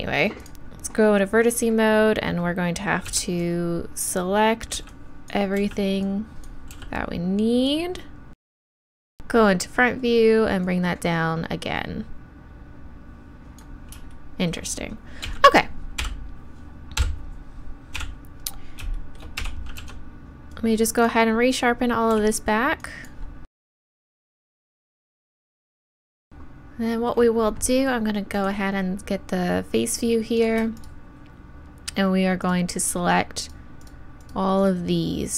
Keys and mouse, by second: 1.9 click, 3.1 b, 4.7-9.1 b, 9.1 KP_1, 10.6 click, 11.0 click, 12.3-15.3 drag, 15.3 z, 16.0 KP_1, 17.0 KP_3, 19.4 a, 19.8 b, 22.1 b, 23.9 b, 24.0 shift+e, 24.3 click, 24.7 z, 25.2 right click, 25.5 shift+e, 25.8-30.4 drag, 30.4-35.3 right drag.